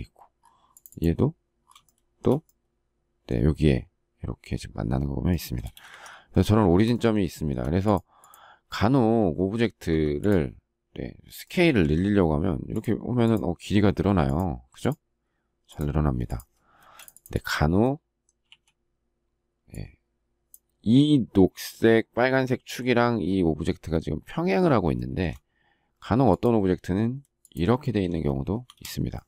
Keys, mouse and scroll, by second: 1.8 shift+middle click, 5.6 space, 5.7 Escape, 7.3 shift+middle click, 7.4 shift+double middle click, 9.9 Escape, 16.8 space, 27.8 shift+middle click, 28.3 space, 28.6 Escape.